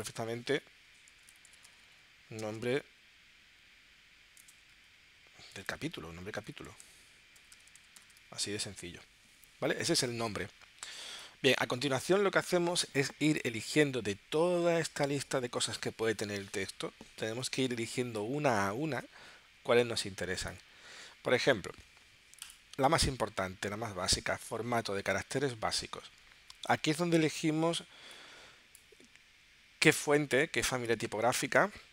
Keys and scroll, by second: 1.1-2.4 typing, 3.5-8.0 typing.